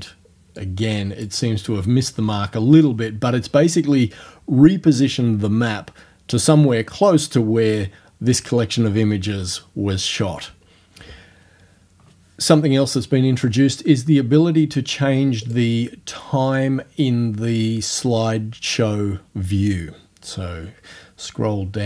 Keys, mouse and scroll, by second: 0.0 scroll down 1, 0.6 click, 1.4 click, 2.4 scroll down 1, 2.6-4.1 drag, 15.4 click, 20.5 scroll down 2, 21.5-21.8 scroll down 2.